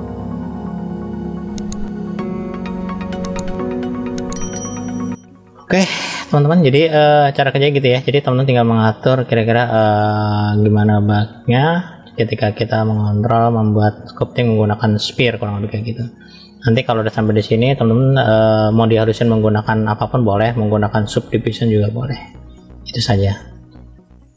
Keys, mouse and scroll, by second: 0.0 middle click, 0.2-0.7 scroll down 3, 0.6 middle click, 1.1 click, 1.2 middle click, 1.5 middle click, 1.8 click, 2.0 middle click, 2.0 click, 2.1 middle click, 2.3 middle click, 2.4 scroll down 1, 2.5 middle click, 2.7 middle click, 2.9 click, 3.0 middle click, 3.1 scroll up 3, 3.2 middle click, 3.2 click, 3.5 middle click, 3.6 scroll down 3, 3.7 middle click, 4.0 scroll up 1, 4.4 click, 4.5 scroll up 2, 4.6 middle click, 4.9 click, 5.0 scroll down 2, 5.1 middle click, 5.8 middle click, 6.4-6.8 scroll up 2, 6.8 middle click, 7.8-8.1 scroll down 1, 8.1 middle click, 9.3-13.5 middle drag, 13.9 middle click, 15.0-15.4 scroll up 1, 17.2-17.7 drag, 18.2 scroll down 1, 20.2-21.3 scroll down 1, 22.8 scroll down 1, 23.2-24.3 middle drag.